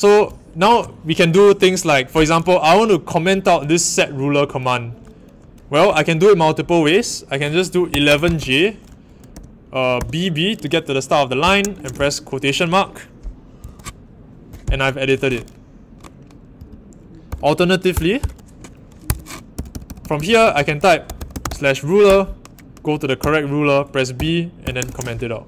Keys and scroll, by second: 7.6-9.3 typing, 11.1-12.2 typing, 13.6 Home, 17.2-18.1 typing, 19.0 Escape, 19.3-21.9 typing, 22.0 Return, 23.1 typing, 24.3-25.3 typing.